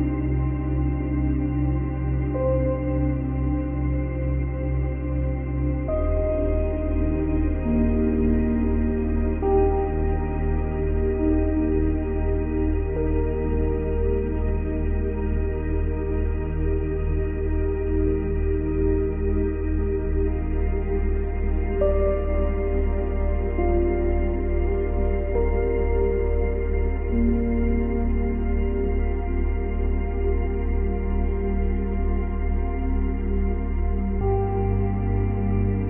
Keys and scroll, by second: 14.0 space, 16.6 space, 17.6 F9, 33.8 Delete.